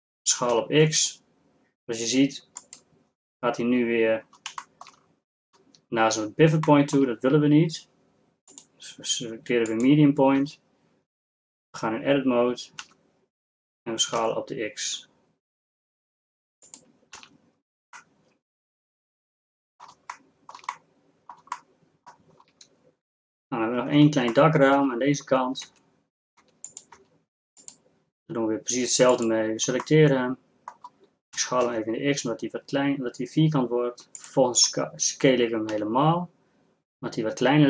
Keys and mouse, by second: 0.6 s, 10.4 Tab, 12.9 s, 17.4 z, 21.1 middle click, 21.3-24.6 middle drag, 25.8 Tab, 26.6 Tab, 27.7 Tab, 28.3 Tab, 31.4 s, 36.1 s.